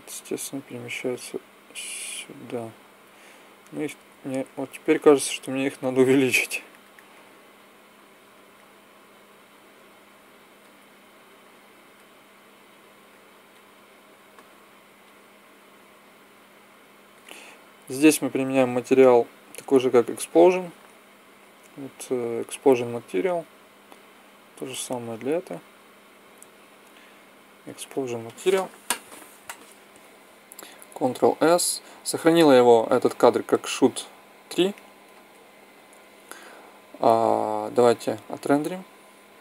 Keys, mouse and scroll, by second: 4.3 s, 6.1-7.5 drag, 9.5 s, 11.1 click, 14.4-16.7 drag, 16.7-17.7 middle drag, 17.7 click, 19.4-22.6 drag, 26.8-27.8 middle drag, 28.5-30.9 middle drag, 30.9 ctrl+s, 38.3-39.4 drag.